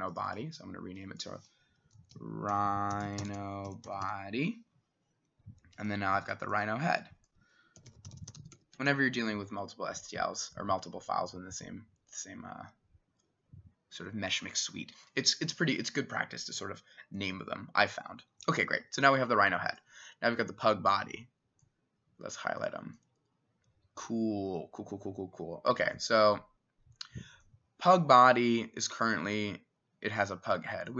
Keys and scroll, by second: 1.9-4.6 typing, 7.6-9.4 typing.